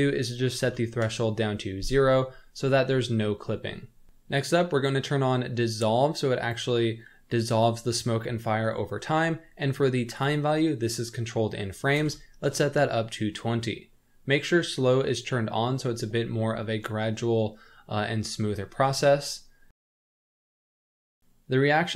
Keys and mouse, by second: 0.0-2.3 drag, 6.1 click, 10.2-13.8 drag, 20.1 click.